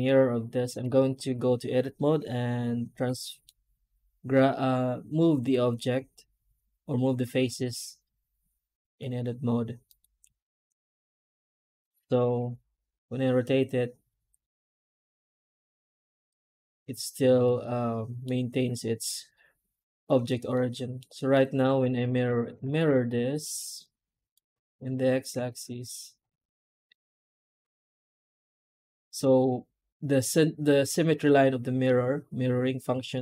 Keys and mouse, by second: 0.7 Tab, 10.5 Tab, 17.3 middle drag, 17.6-18.1 middle drag, 20.0 Tab, 20.4 middle click, 20.8 alt+middle click, 21.2 middle click, 21.4 middle click, 21.8 Tab, 21.9 shift+middle drag, 22.1 middle click, 25.5 Tab, 26.1 3, 26.4 right click, 26.8 middle click, 27.1 alt+middle click, 27.2 alt+middle click, 27.7 alt+middle click, 28.5 shift+middle click, 28.6 shift+middle click, 29.2 shift+middle click, 29.6 shift+middle click.